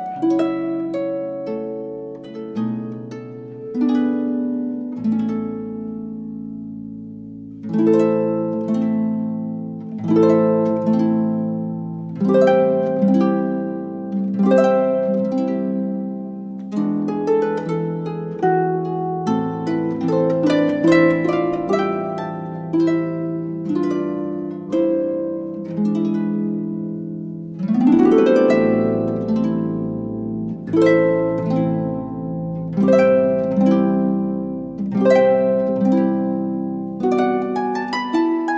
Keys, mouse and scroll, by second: 34.3 right click, 35.2 g.